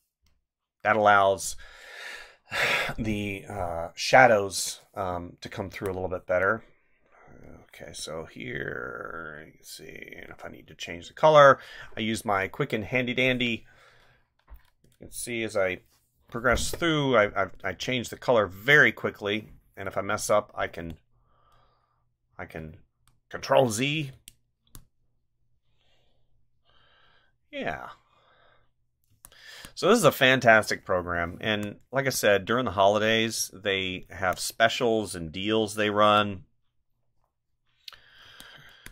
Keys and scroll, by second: 5.7 space, 7.6 ctrl+z, 19.0 ctrl+z, 22.6 ctrl+z, 24.1 space, 29.1 space, 31.3 space, 38.2 space.